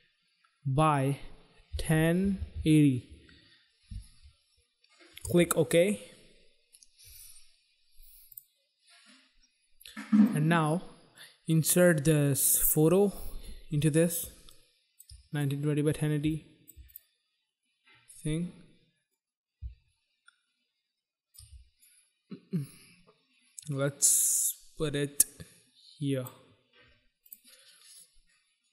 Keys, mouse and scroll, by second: 0.8 click, 1.7-3.0 typing, 5.2 Return, 8.2 click, 10.1 click, 11.1 click, 14.4 shift+click, 15.3 click, 16.2 shift+click, 16.9 click, 18.9 click, 21.8 click, 27.1 click.